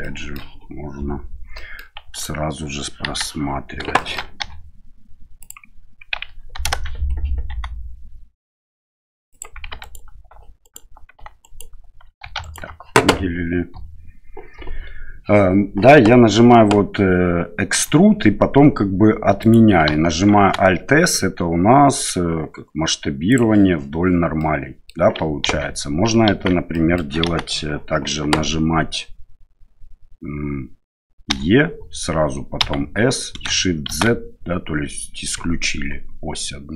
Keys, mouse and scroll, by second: 0.1 middle click, 1.6 middle click, 2.1 alt+right click, 3.0 KP_1, 3.9 middle click, 4.4 e, 7.5 s, 9.8 right click, 10.6 alt+right click, 11.4 alt+right click, 12.2 3, 12.4 right click, 17.7 e, 20.3 alt+s, 24.4 middle click, 25.4 ctrl+z, 26.3 ctrl+z, 26.7 middle click, 27.2 KP_1, 31.3 e.